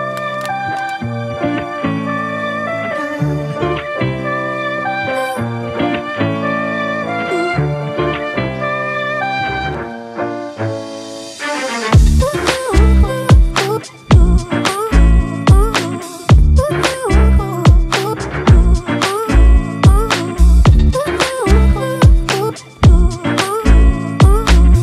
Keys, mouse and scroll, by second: 1.2 alt+click, 4.6 ctrl+t, 5.7 alt+shift+click, 8.9 Return, 9.2 Right, 9.6 Down, 10.6 Left, 10.8 Left, 11.0 Left, 15.3 right click, 19.9 ctrl+t, 21.9 alt+shift+click.